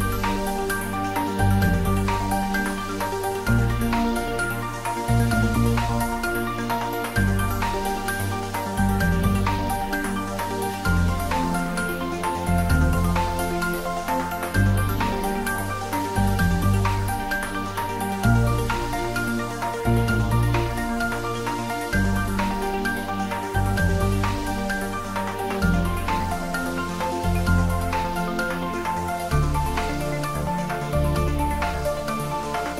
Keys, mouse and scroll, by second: 6.8 click, 9.7 x, 10.2 click, 10.7-11.6 middle click, 11.6-12.9 scroll up 1, 13.2 middle drag, 15.5 `, 15.9 3, 16.5-18.1 scroll down 1, 18.1 click, 18.6 scroll up 1, 20.1-20.7 click, 20.9 scroll up 1, 21.6-22.5 middle drag, 23.2 scroll down 1, 23.5 middle click, 24.3 Tab, 24.8 click, 27.4 2, 27.9 click, 29.6 alt+shift+click.